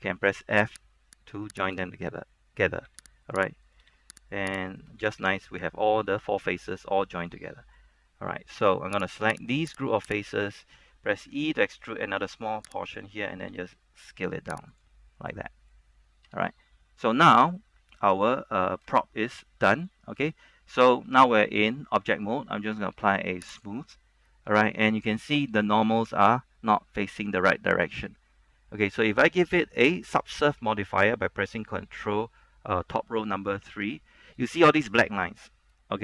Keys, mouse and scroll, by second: 0.7 f, 1.3 right click, 3.0 f, 3.4 right click, 3.8 shift+right click, 4.0 f, 4.3 right click, 4.8 shift+right click, 5.2 shift+right click, 5.2 f, 5.4 scroll down 1, 5.6 middle click, 7.3 scroll down 1, 7.5 middle click, 8.4 a, 9.3 right click, 10.4 shift+right click, 11.4 shift+e, 13.0 click, 13.7 s, 14.8 click, 15.1-16.4 middle drag, 16.4 Tab, 16.6 scroll down 1, 17.2 middle click, 17.9 scroll up 1, 18.1 shift+middle click, 18.4 middle click, 19.3 shift+middle click, 20.4-21.5 shift+middle drag, 23.7 click, 24.7 middle click, 25.5-27.6 shift+middle drag, 27.9 scroll up 1, 28.3 shift+middle click, 33.8 ctrl+3, 34.3 middle click, 35.3 shift+middle click.